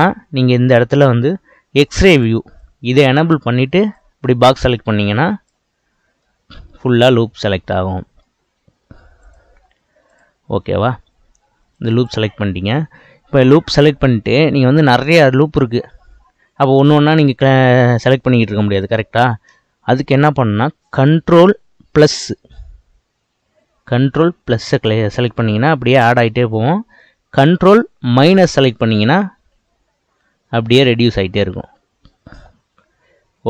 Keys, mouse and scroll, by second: 2.0-4.0 drag, 6.2-9.3 middle drag, 9.3 click, 10.0 click, 11.8 click, 22.6 ctrl+KP_Add, 23.8 ctrl+KP_Add, 24.6 ctrl+KP_Add, 29.6 ctrl+KP_Subtract, 30.2 ctrl+KP_Subtract, 31.4 ctrl+KP_Subtract.